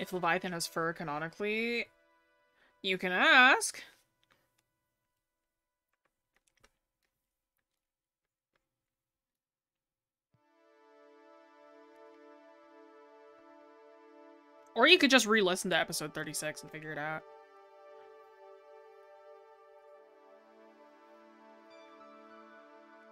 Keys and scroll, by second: 6.0 scroll up 1.